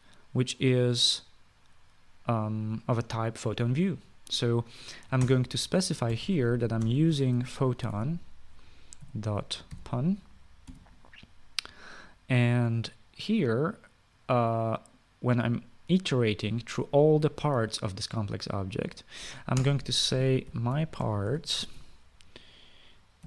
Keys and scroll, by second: 6.0 Return, 6.6-11.4 typing, 20.3 Return, 21.0-23.2 typing.